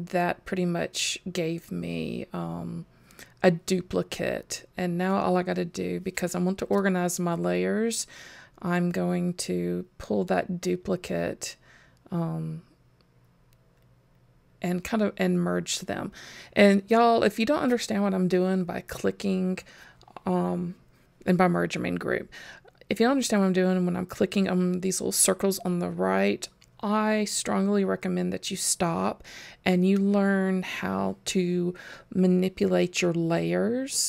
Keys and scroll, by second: 18.1 super+g, 26.7 super+g.